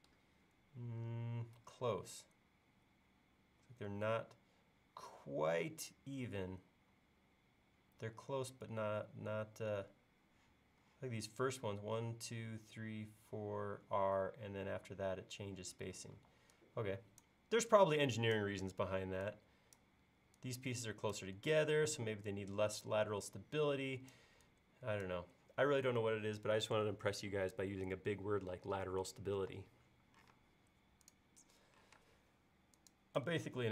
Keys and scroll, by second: 16.2 e, 30.3 space, 31.9 m.